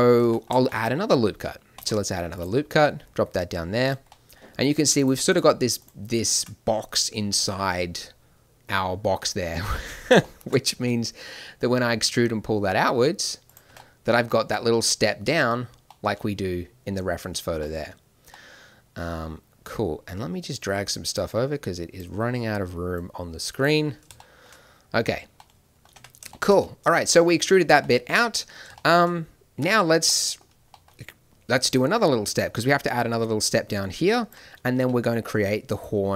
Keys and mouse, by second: 1.7 ctrl+r, 10.7 e, 13.6 Tab, 23.1 click, 23.7 middle click, 25.9 Tab, 33.1 d, 33.3-35.3 drag, 35.6 d, 35.7-36.1 drag.